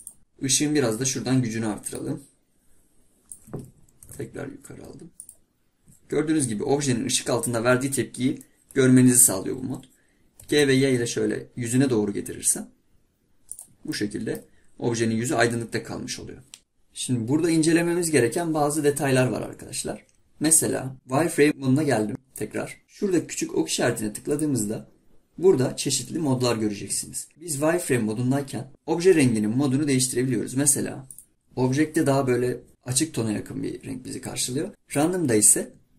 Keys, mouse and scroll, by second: 2.0-4.0 drag, 13.9-14.5 middle drag, 24.3-27.3 drag, 31.3 click.